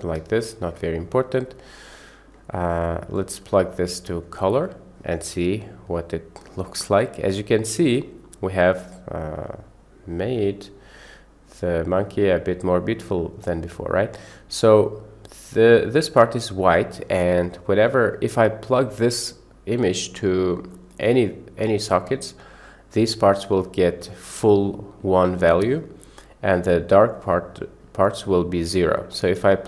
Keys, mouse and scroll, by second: 0.4 ctrl+shift+click, 1.1-1.8 drag, 2.1 click, 2.7 middle click, 3.2-4.2 drag, 4.6 click, 5.3-7.3 middle drag, 8.8-12.0 middle drag, 14.6 shift+middle click, 18.1 click.